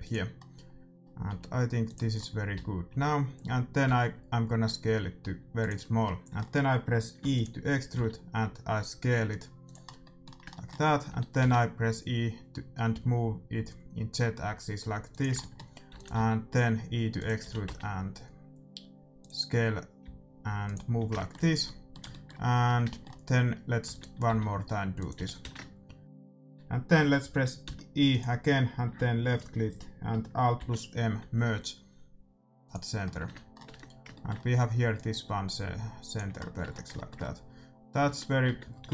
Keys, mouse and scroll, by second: 0.3-4.2 middle drag, 1.2 s, 2.5 a, 2.9 a, 3.8 s, 6.0 middle click, 6.1-8.3 middle drag, 7.3 e, 7.9 s, 9.8-12.3 middle drag, 11.0 e, 15.3-17.4 middle drag, 15.8 e, 16.1 s, 17.4 g, 19.5-21.3 middle drag, 19.9 s, 23.8 e, 23.8 middle click, 24.2 s, 25.1 g, 26.0-27.6 middle drag, 27.6 e, 30.5 alt+m, 33.0-34.9 middle drag, 33.2 Tab, 33.7 Tab, 34.9-36.9 drag, 36.6 Tab, 36.9-38.9 middle drag, 37.9 Tab, 38.4 Tab, 38.8 a.